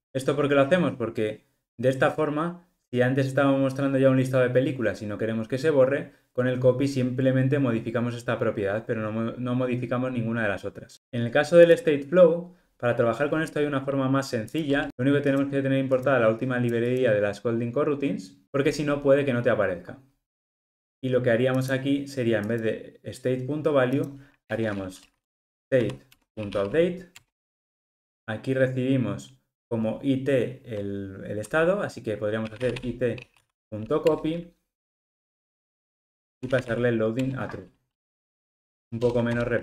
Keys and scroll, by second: 10.9 super+z, 19.3 alt+super+[, 26.2 Return, 34.1 Return.